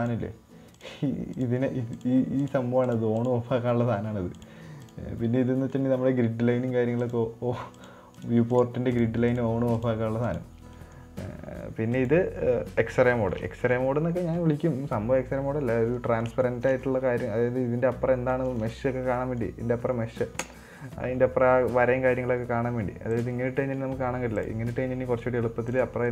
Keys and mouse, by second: 1.8 drag, 2.3 click, 2.9 click, 3.2 click, 3.6 click, 4.8 click, 5.2 click, 6.1-6.9 middle drag, 7.6 click, 8.6 click, 8.9 click, 9.3 click, 9.7 click, 10.2 click, 10.7 click, 11.2 middle click, 12.4 click, 13.6 shift+middle drag, 13.9-14.2 middle drag, 14.8 middle drag, 16.4-16.7 middle drag, 16.9 shift+middle drag, 17.2-18.8 middle drag, 18.9 right click, 19.1 Tab, 19.6 middle click, 23.5 click, 25.7 right click.